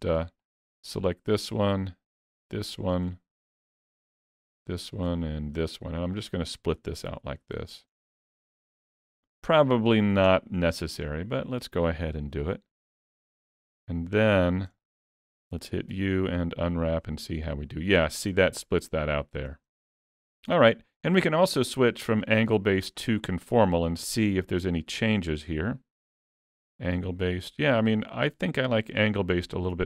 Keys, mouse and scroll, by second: 0.4 click, 0.9 middle click, 2.5 shift+click, 3.1 middle click, 3.5 middle click, 4.6 shift+click, 5.1 middle click, 6.2 shift+click, 7.1 ctrl+e, 8.3 alt+a, 9.2 alt+a, 9.4-10.1 scroll down 6, 10.3 shift+middle click, 10.8 middle click, 12.1 l, 12.7 l, 13.7-14.8 scroll down 8, 14.8 shift+middle click, 15.9 u, 21.2 click, 26.0 click.